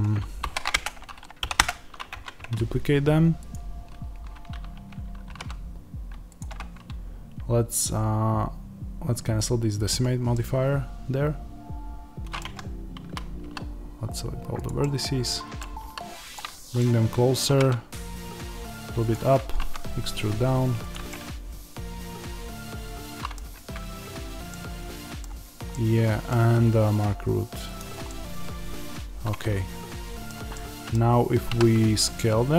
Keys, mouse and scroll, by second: 0.3 shift+d, 0.7 Return, 1.5 p, 1.6 Return, 1.6-3.4 middle drag, 2.0 Tab, 3.4 click, 5.2 g, 6.3 click, 9.8 click, 10.5-14.5 middle drag, 12.3 Tab, 12.9 a, 14.5 click, 14.7-15.7 middle drag, 15.7 s, 16.3 click, 16.7 middle click, 17.4 g, 19.0-21.0 drag, 19.4 e, 21.0-23.5 middle drag, 23.5 Tab, 24.4 middle click, 27.7 click, 28.0-31.4 middle drag, 31.4 s.